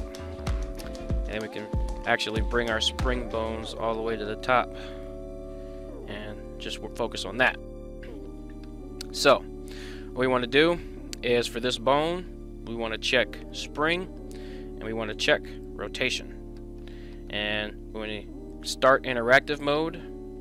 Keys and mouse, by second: 1.4 click, 2.6-4.0 drag, 5.0 click, 8.6-9.2 middle drag, 9.6 middle click, 13.5 click, 15.5 click, 16.5 shift+middle drag, 17.0 middle click, 18.4 click.